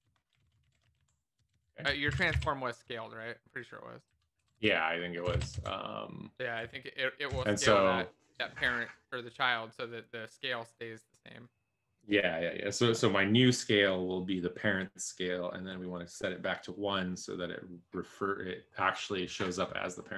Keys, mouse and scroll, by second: 0.7 alt+shift+f, 0.9 ctrl+s, 0.9 Up, 1.3 Down, 1.5 Down, 2.1 shift+Delete, 2.4 ctrl+s, 2.8 Return, 3.0 Up, 3.5 ctrl+s, 3.5 Up, 4.0 Up, 4.4 Up, 4.5 Up, 5.4 ctrl+s, 5.5 Down, 6.6 Down, 7.3 Down.